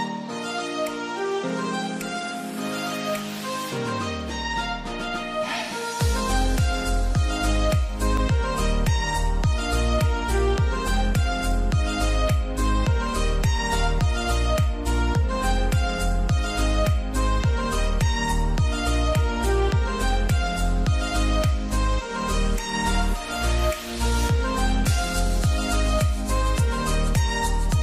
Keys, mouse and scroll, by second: 5.5 Delete, 6.8 Return, 15.3 double click, 18.4 4, 19.5 Tab, 20.3 3, 21.5 Tab, 22.2 3, 24.2 6, 27.4-27.8 typing.